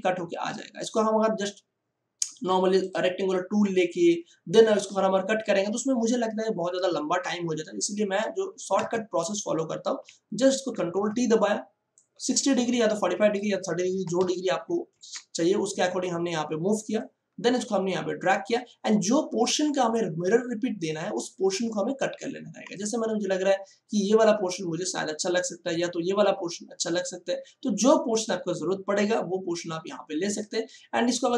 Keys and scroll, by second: 8.7 ctrl+alt+z, 10.7 ctrl+t, 14.0 4, 14.1 5, 14.8 Return.